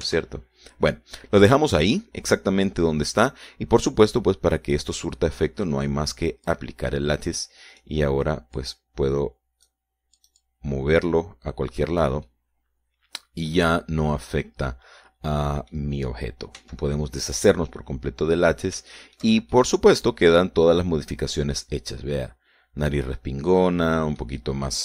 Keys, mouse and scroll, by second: 1.5 ctrl+z, 2.1 scroll down 2, 2.3-5.1 middle drag, 6.3 right click, 8.0 click, 9.3 right click, 10.1-11.4 drag, 11.7-13.7 drag, 13.8-15.3 middle drag, 15.4-16.1 scroll up 1, 16.1 scroll down 1, 16.1-17.4 middle drag, 18.1 x, 18.7 click, 20.4 shift+middle click, 21.1-24.8 shift+middle drag.